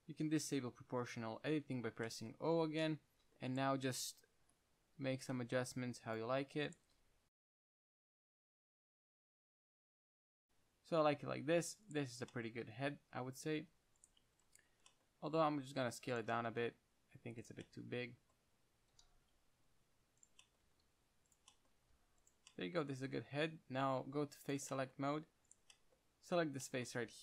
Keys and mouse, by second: 0.0 g, 0.1 middle drag, 1.4-3.1 drag, 2.9 o, 3.6-6.0 drag, 4.7 KP_1, 5.3 g, 6.5-7.0 drag, 7.1 g, 7.9 KP_3, 9.5 a, 9.6 a, 9.7 s, 10.2 click, 10.5 Tab, 13.1 Tab, 13.6 Tab, 13.8 g, 14.5 Tab, 15.6 s, 16.6 s, 19.1 s, 20.9 s, 22.0 g, 24.0 ctrl+Tab.